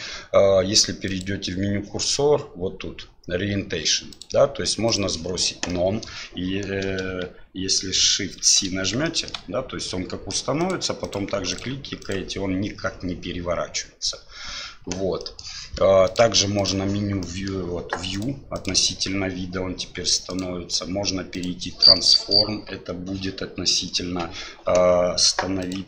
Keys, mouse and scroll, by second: 1.1 click, 4.1-5.0 drag, 5.7-6.1 middle drag, 8.4 shift+c, 9.0 shift+middle drag, 9.9-10.3 middle drag, 10.6 click, 11.0 click, 11.5 click, 12.0 click, 15.4 middle click, 16.2-16.8 drag, 17.2 middle click, 18.1 click, 18.5 click, 20.4-21.4 drag, 22.0-22.4 middle drag, 25.6 click.